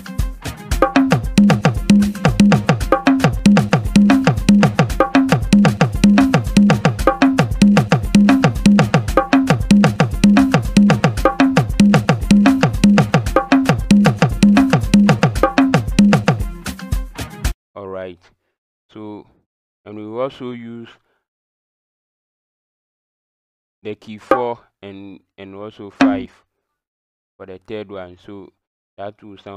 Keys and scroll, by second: 0.8-15.7 typing, 24.3 KP_4, 26.0 KP_5.